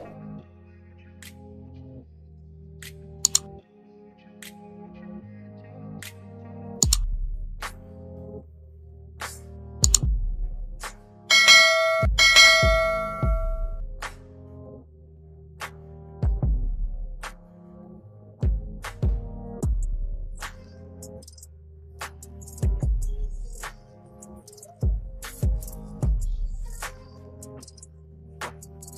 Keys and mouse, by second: 0.0 Up, 0.6 Return, 1.4 t, 2.6 click, 5.0-6.6 typing, 7.8-11.6 typing, 13.0 click, 14.7 click, 16.4 click, 17.2 KP_7, 17.8 KP_Enter, 20.6 click, 21.5 KP_8, 21.9 KP_Enter, 23.2 click, 27.2 v, 27.8 click.